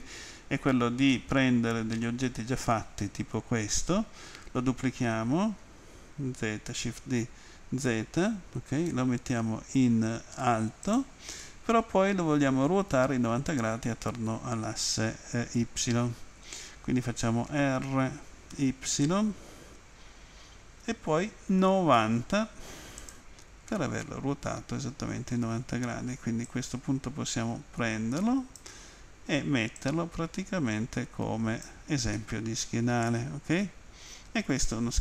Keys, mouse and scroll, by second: 1.1 middle click, 6.9 z, 10.9 click, 11.4 middle click, 17.5 r, 18.5 y, 21.6-22.0 typing, 23.0 click, 23.7 middle click, 26.5 click, 29.8 click, 32.2 middle click, 34.1 middle click.